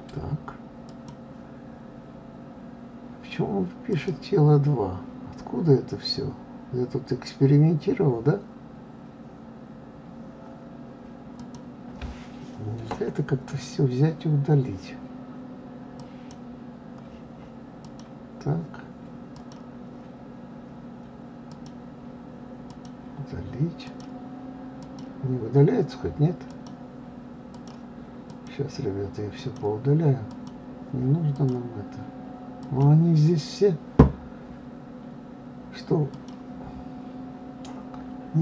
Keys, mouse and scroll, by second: 3.9-7.0 drag, 13.5-16.4 drag, 17.8-22.3 drag, 22.7-30.7 drag, 31.3-34.4 drag, 36.1 click.